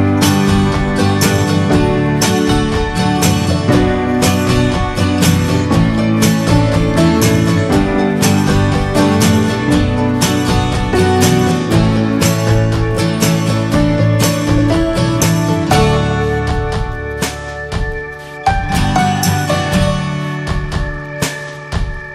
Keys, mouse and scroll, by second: 0.4 ctrl+e, 1.3 ctrl+z, 1.6 middle click, 2.1 ctrl+r, 3.9 shift+middle click, 4.4 scroll up 1, 4.8 shift+middle click, 5.4 ctrl+r, 6.4 ctrl+b, 8.6 scroll down 1, 9.0-11.8 middle drag, 11.8 ctrl+r, 14.1 ctrl+click, 14.4 ctrl+r, 16.3 scroll down 1, 16.6 middle click, 16.8 scroll up 1, 17.2 ctrl+r, 18.2 Tab, 18.9-19.3 drag, 19.3 scroll down 4, 19.6-20.4 shift+middle drag, 20.4 scroll down 5, 20.8-21.2 shift+middle drag, 21.2-22.1 drag.